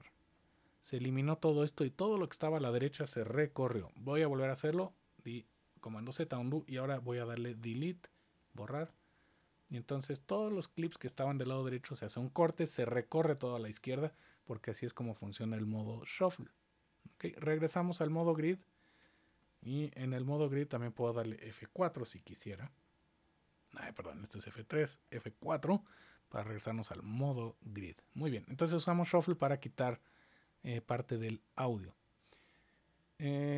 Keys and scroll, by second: 3.6 super+z, 8.8 BackSpace, 23.0 F3, 25.0 F4.